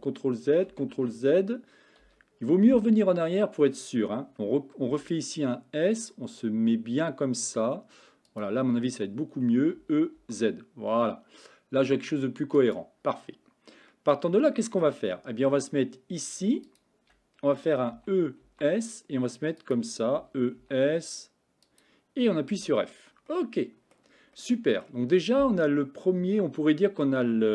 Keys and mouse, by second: 0.0 ctrl+z, 0.7 ctrl+z, 2.1 KP_1, 4.9 s, 9.8 e, 13.9 middle click, 18.0 e, 20.2 e, 22.6 f, 23.3 middle click, 24.4 middle click.